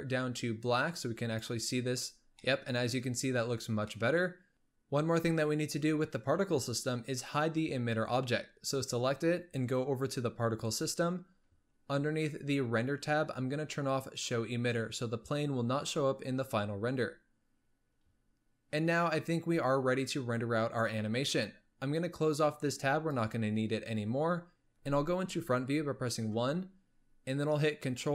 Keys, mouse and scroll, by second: 2.1-2.6 scroll down 2, 2.6-3.1 middle drag, 3.1-4.0 scroll up 1, 4.0 middle click, 4.5-6.3 scroll up 1, 7.2-8.4 drag, 10.8 click, 12.0-14.5 scroll up 10, 14.5 click, 22.4-25.4 drag, 26.4 KP_1.